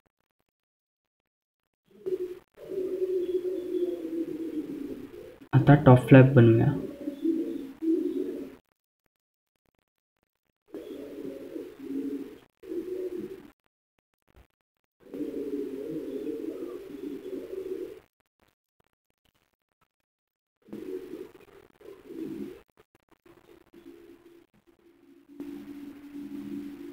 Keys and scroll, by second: 3.4 F2, 6.3 F3, 6.6 F2.